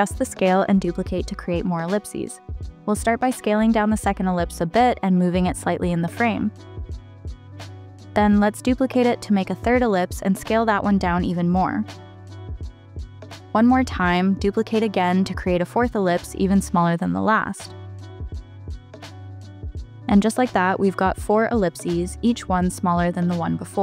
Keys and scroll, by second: 8.3 super+d, 15.2 super+d.